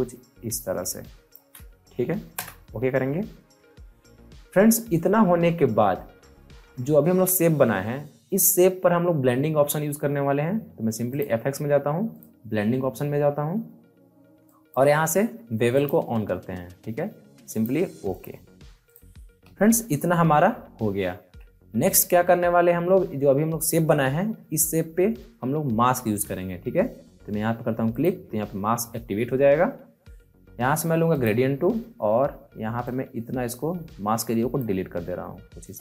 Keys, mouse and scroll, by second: 2.3 Return, 11.0 click, 14.4 click, 19.5 alt+scroll up 1, 20.1 alt+scroll down 1, 27.9 click, 31.1-35.8 drag.